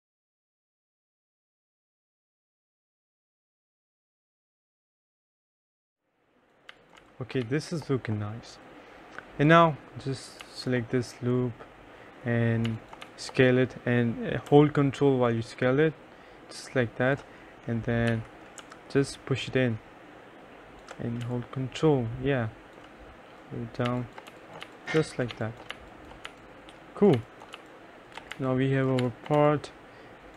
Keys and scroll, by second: 0.0-0.1 typing, 3.2 3, 4.7-8.0 typing, 10.5 2, 12.8 2, 13.1 1, 18.2 e, 21.3 3, 23.7-29.4 typing.